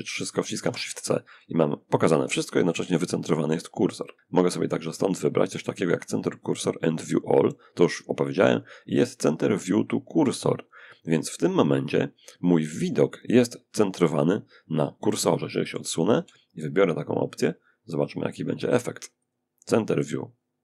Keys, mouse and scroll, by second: 1.9-3.3 middle drag, 4.0 click, 14.5-15.5 shift+middle drag, 16.3 click, 18.5 click.